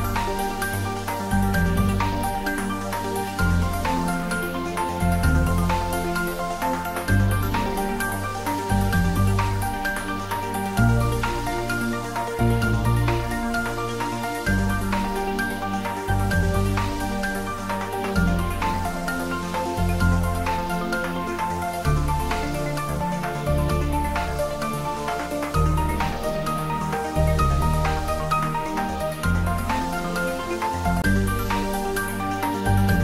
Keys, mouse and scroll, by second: 8.5-11.3 drag, 10.1 right click, 11.0-14.4 drag, 14.9-16.3 scroll up 1, 16.3 click, 21.3 click, 29.6-30.3 drag.